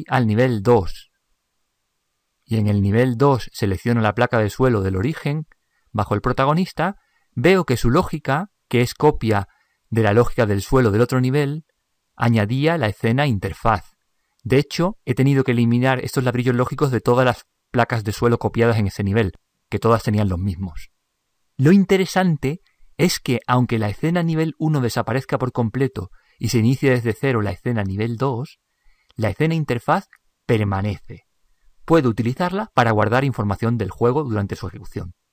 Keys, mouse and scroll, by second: 1.1-2.4 drag, 4.1 right click.